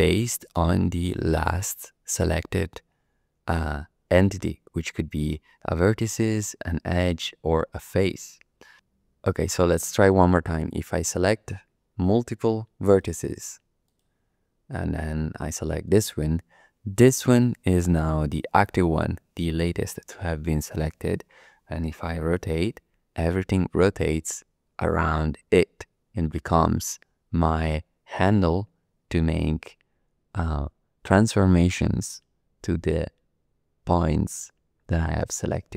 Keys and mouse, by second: 7.1 click, 12.8 shift+click, 14.7 shift+click, 15.8 shift+click, 22.7 r.